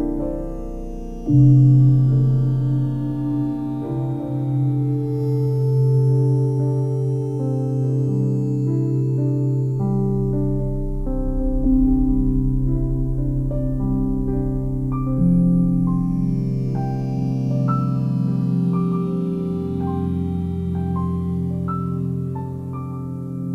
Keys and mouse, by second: 0.1 x, 1.1 click, 1.9 click, 2.6-3.6 typing, 4.1 click, 5.4 ctrl+alt+click, 5.8 alt+shift+click, 6.1 click, 6.7 click, 7.1 click, 8.0-8.4 typing, 8.8 click, 9.3 click, 10.0 ctrl+alt+click, 11.0 g, 11.4 ctrl+alt+click, 12.2-18.6 alt+shift+drag, 14.8 typing, 18.3 typing, 18.8 alt+shift+click, 20.0 click, 21.0-21.8 typing, 23.3 click.